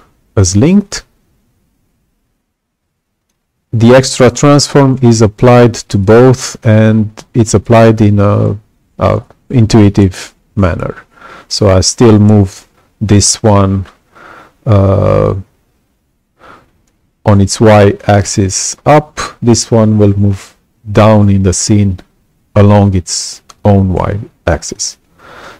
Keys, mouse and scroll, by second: 0.8-3.2 alt+drag, 24.4-25.5 alt+drag.